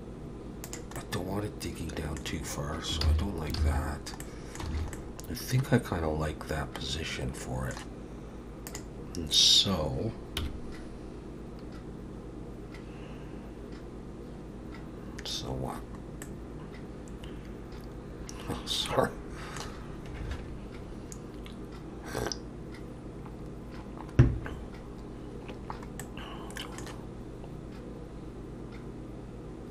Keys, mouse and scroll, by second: 1.0 middle click, 3.0 ctrl+z, 3.6 ctrl+z, 4.2 middle click, 4.7 alt+a, 4.9 middle click, 8.7 click, 10.4 KP_1, 16.2 middle click, 26.0 middle click.